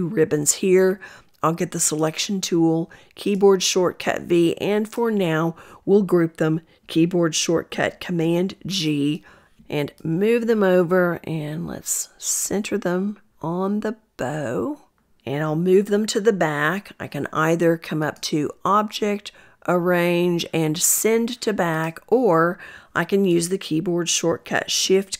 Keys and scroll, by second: 1.3 v, 5.7 ctrl+g, 22.8 shift+super+[.